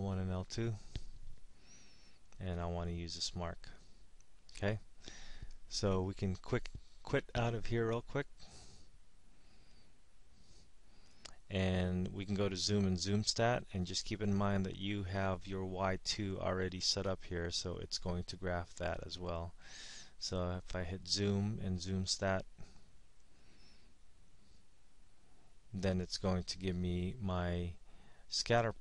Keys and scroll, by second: 1.5 Down, 7.2 Down, 12.1-12.8 typing, 23.3 9.